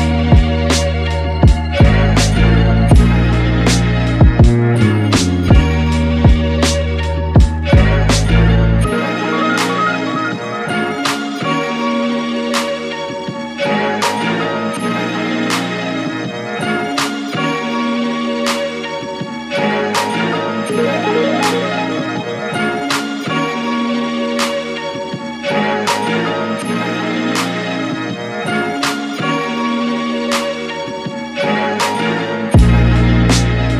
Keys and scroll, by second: 18.0-19.8 typing.